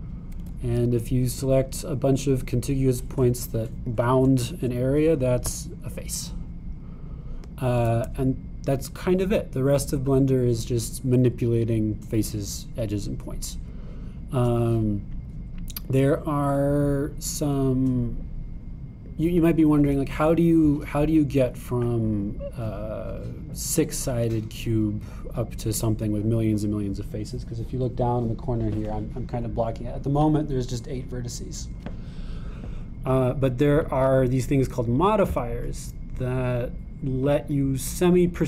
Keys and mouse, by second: 6.4 g, 35.0 click, 36.3-38.4 drag.